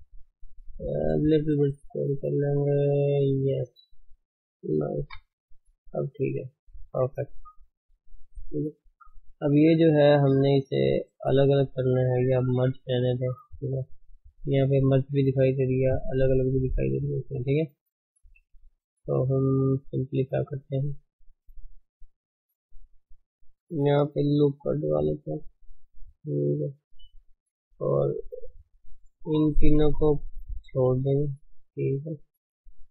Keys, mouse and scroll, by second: 0.5 s, 2.2-4.7 middle drag, 4.7-5.1 scroll down 3, 5.1 KP_1, 5.5 scroll down 1, 5.8 Tab, 6.1-6.4 scroll down 3, 6.4 ctrl+s, 6.6-7.5 scroll up 6, 7.0 Tab, 7.5 shift+middle click, 8.4 click, 10.7 shift+middle click, 11.0 shift+z, 11.5 shift+z, 12.1 Tab, 12.5 alt+h, 13.2 shift+z, 19.3 shift+z, 20.2 click, 20.5 Tab, 21.5 Tab, 21.8 click, 22.0 Tab, 24.5 ctrl+r, 27.7-28.3 scroll up 1, 28.3-30.7 shift+middle drag, 30.7 ctrl+click, 31.7 ctrl+click.